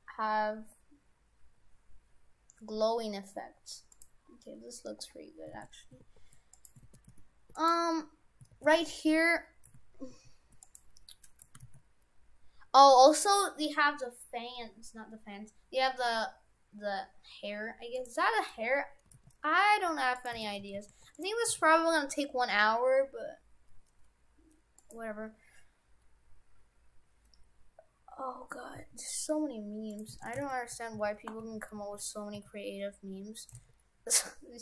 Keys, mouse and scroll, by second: 5.6 shift+f, 7.0 shift+f, 8.6 shift+f, 11.7 shift+a, 19.1 g, 20.4 shift+f, 21.5 s, 28.8 s, 30.2 shift+f, 32.4 s, 33.6 s.